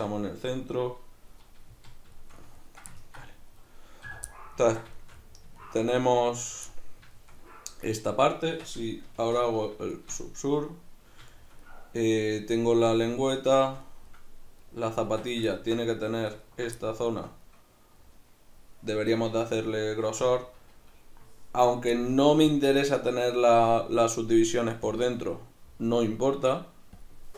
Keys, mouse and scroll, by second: 0.5 right click, 1.5-6.4 middle drag, 1.7 z, 4.1 a, 6.4 right click, 6.7-16.3 middle drag, 8.5 Tab, 9.2 ctrl+2, 15.1 Tab, 16.3 alt+right click, 16.8-24.9 middle drag, 20.2 a, 24.9-27.3 drag.